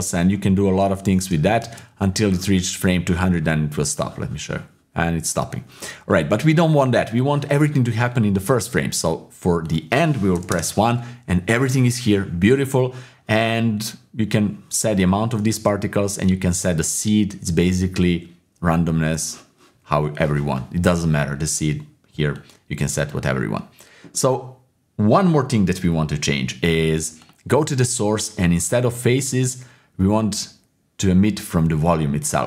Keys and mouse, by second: 1.7 shift+space, 3.9-6.1 drag, 9.7 click, 13.9-15.3 drag, 15.7 ctrl+z, 16.4-19.2 drag, 22.4 click, 29.0-32.3 drag.